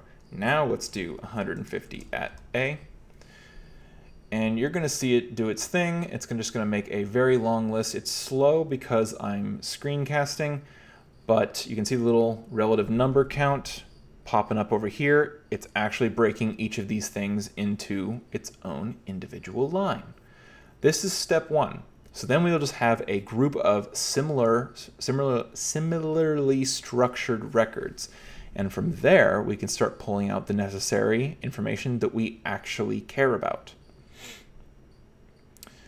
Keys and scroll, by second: 0.7-2.3 typing.